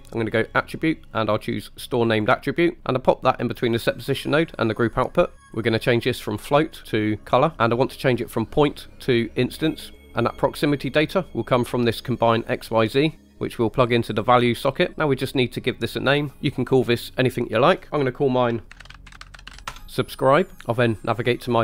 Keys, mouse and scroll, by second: 5.0 click, 5.4 scroll up 2, 6.3-7.4 drag, 8.6-10.0 drag, 10.1 right click, 12.2-14.4 drag, 15.2-19.7 drag.